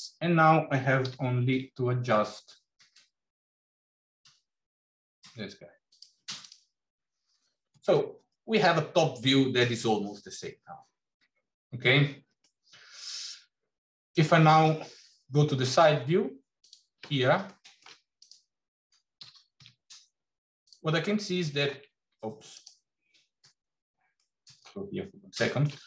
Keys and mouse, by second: 0.9 g, 6.4 click, 12.3-14.4 middle drag, 17.3 shift+middle click, 18.1 click, 19.0 g, 24.1 shift+middle click, 25.3 shift+middle click.